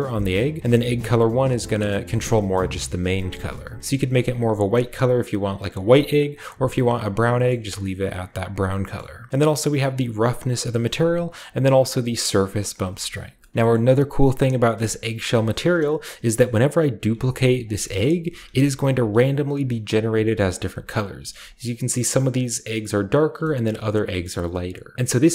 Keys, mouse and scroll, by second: 0.3 click, 1.1-5.9 drag, 7.4-8.5 shift+middle drag, 8.5 shift+click, 9.3-10.9 drag, 10.7 right click, 11.2-12.8 drag, 12.7 right drag, 13.1-13.5 scroll down 3, 13.5 ctrl+w, 13.5 shift+middle click, 13.5-14.7 shift+scroll up 2, 13.7-14.8 shift+middle drag, 14.7-15.6 shift+scroll up 1, 15.0-15.4 shift+middle drag, 15.6-17.1 middle drag, 16.3-16.9 scroll down 1, 16.9-17.6 scroll down 1, 17.0 d, 17.6-18.8 drag, 18.3 d, 18.9 shift+click, 19.0 d, 19.5 click, 19.5 d, 20.0 click, 20.1 d, 20.5 click, 21.0 click, 21.4 click, 22.4-23.2 shift+drag, 23.3-24.9 shift+middle drag.